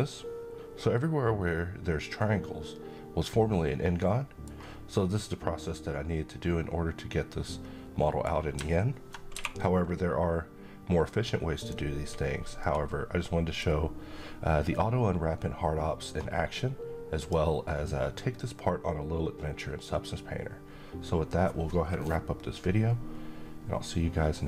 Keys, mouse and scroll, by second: 4.0 scroll down 1, 4.4-7.9 middle drag, 8.9 q, 11.1 click, 12.0-13.3 middle drag, 16.7 click.